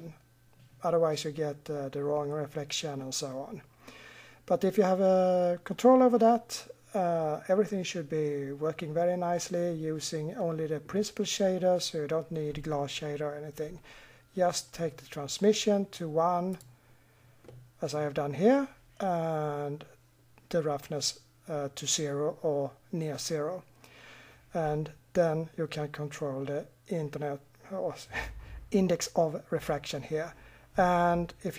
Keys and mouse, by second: 17.4 middle click.